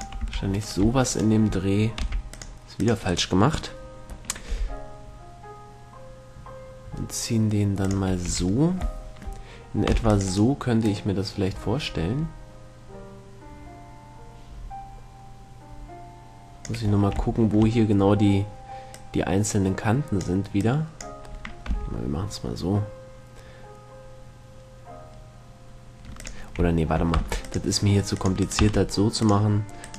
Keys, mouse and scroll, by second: 0.3-2.2 drag, 0.6 a, 0.9-2.1 right drag, 1.9 middle click, 2.3 c, 4.1-5.3 right drag, 4.7 g, 5.3-6.4 middle drag, 8.3-9.3 drag, 8.5 a, 9.3 middle click, 9.5 click, 10.3 middle click, 10.3 c, 10.6-13.1 drag, 10.6-12.5 right drag, 17.1-19.2 middle drag, 19.2-22.7 drag, 21.9 g, 26.5-28.3 drag, 27.5 c, 28.7-29.9 right drag, 28.9 x.